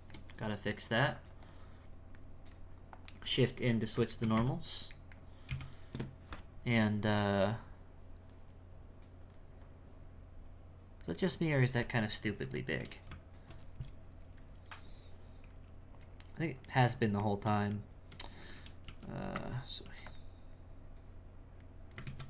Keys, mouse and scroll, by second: 0.0-1.1 ctrl+shift+middle drag, 1.1-3.5 drag, 3.5 middle click, 4.3 KP_1, 4.9 middle click, 6.9-8.7 scroll up 2, 8.7-11.7 scroll down 2, 11.9-12.5 scroll up 2, 12.5 shift+middle click, 13.1 Tab, 16.7-18.5 ctrl+middle drag, 18.5 g, 18.8 f, 19.8 f, 20.5-22.0 drag, 22.0 ctrl+z.